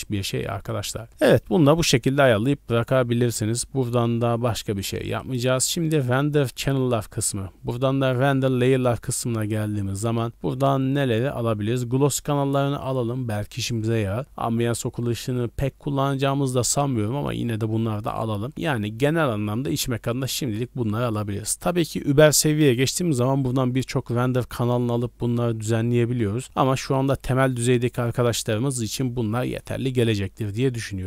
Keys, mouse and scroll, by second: 5.2 click, 5.6 click, 6.4 scroll up 1, 8.6-10.1 scroll up 3, 10.3-10.7 scroll down 2, 11.0 scroll down 2, 11.8 click, 11.8 scroll down 1, 13.0 scroll down 1, 14.2 click, 14.4-15.9 scroll down 2, 17.2 scroll down 2, 17.6-18.1 scroll up 4, 18.6 scroll down 1, 18.8-19.1 scroll down 1, 19.7-20.5 scroll down 3, 30.3-30.8 scroll up 4.